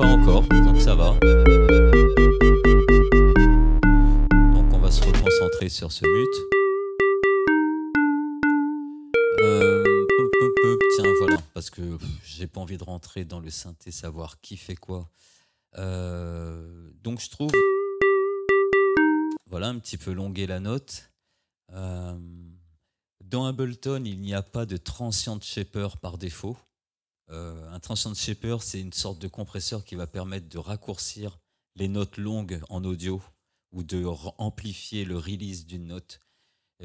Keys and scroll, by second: 5.6 space, 11.4 space, 17.6 space, 19.3 space.